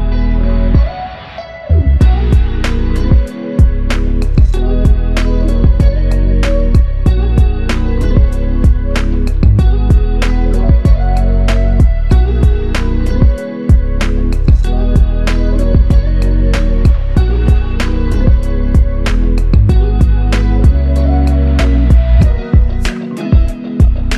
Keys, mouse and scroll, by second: 0.3 f, 6.9 alt+click, 11.2 alt+click, 17.1 alt+click, 20.7 alt+click.